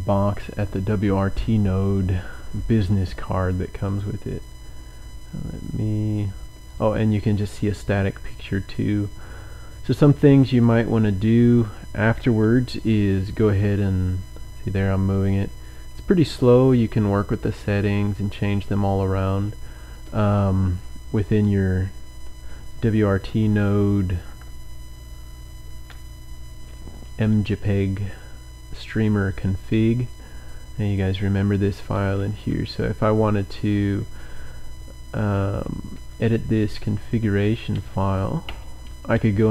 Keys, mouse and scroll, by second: 3.8 click, 6.6 click, 7.8-8.8 scroll down 1, 10.5 click, 11.5-11.8 scroll down 1, 29.6-30.6 drag, 30.9 click, 32.4 Up, 33.1 Up, 35.4 Up, 35.4 Up, 35.9 Up, 36.3 Up, 36.6 Up, 36.7 Up, 37.7 Down, 37.8 Down, 38.5 Return, 39.1 Down, 39.2 Down, 39.3 Down.